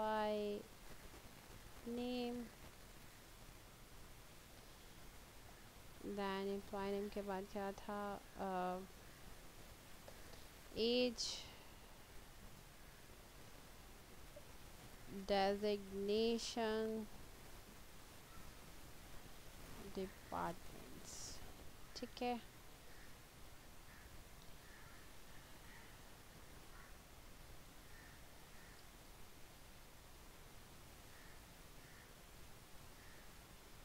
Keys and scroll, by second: 0.0-3.7 typing, 4.3 Tab, 9.9 a, 10.2 g, 10.3 e, 12.6 Tab, 14.4-16.7 typing, 17.1 Tab, 18.3-20.7 typing, 21.5 Tab.